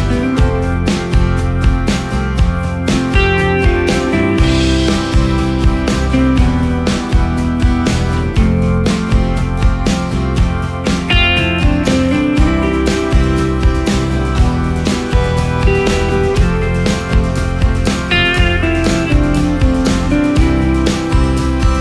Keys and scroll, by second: 12.4 ctrl+space, 13.0 ctrl+space, 13.8 ctrl+space, 18.6 ctrl+x, 20.1 ctrl+f, 21.5 ctrl+g.